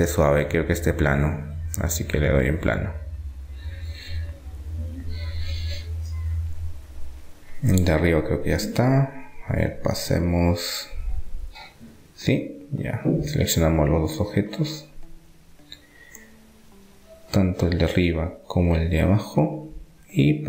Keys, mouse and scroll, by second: 0.7-2.7 drag, 2.6-4.4 middle drag, 4.8-6.4 right drag, 6.4 click, 7.3-9.7 middle drag, 9.7-11.7 drag, 11.5 Tab, 12.0 middle click, 12.4 Tab, 12.8-13.9 middle drag, 13.9-15.7 right drag, 14.5 Tab, 15.5 Tab, 19.7-20.4 right drag.